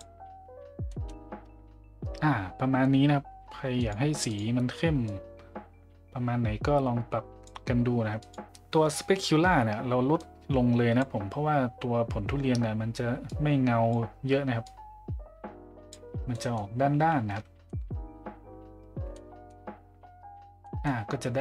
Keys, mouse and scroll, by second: 0.9 middle drag, 3.8 click, 4.3 click, 8.2 click, 10.2 click, 13.3 click, 14.6-15.9 drag, 16.3 middle drag, 17.6 middle drag, 19.1-19.5 middle drag, 20.6 middle drag.